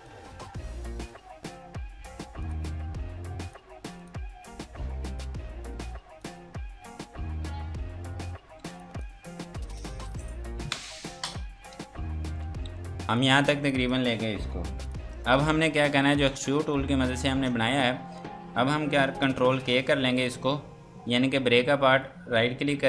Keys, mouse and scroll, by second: 0.8 click, 2.4 click, 7.1-7.4 scroll down 1, 8.6 F2, 8.8 click, 11.7 ctrl+space, 12.6 F3, 13.2 click, 19.0 ctrl+Num_Lock.